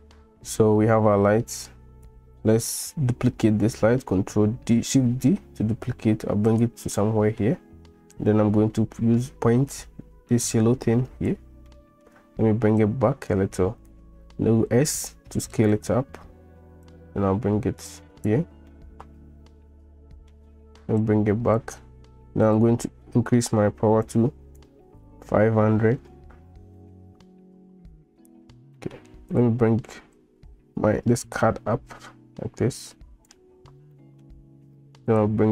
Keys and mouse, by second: 1.7 click, 4.5 shift+d, 7.0 middle drag, 7.3-7.6 drag, 8.2-10.0 middle drag, 10.0 click, 10.4 middle click, 10.5 click, 10.9-11.4 right drag, 11.8 middle click, 12.9 right click, 13.1 click, 14.6 s, 16.9-18.2 drag, 18.7-20.4 middle drag, 21.1 click, 22.5-27.1 drag, 28.9 middle drag, 29.4 click, 30.2-33.3 drag, 33.9-34.3 middle drag.